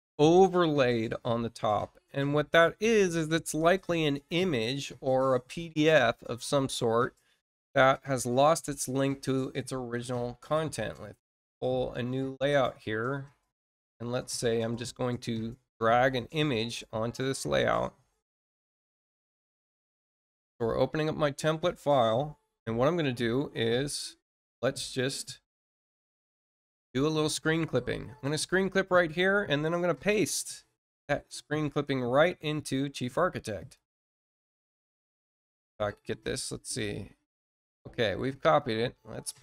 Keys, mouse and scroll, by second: 8.1 click, 10.7 click, 12.0 click, 27.3 click, 31.6 ctrl+click, 33.5 ctrl+click, 34.3 ctrl+middle click, 35.0 click, 38.3 click.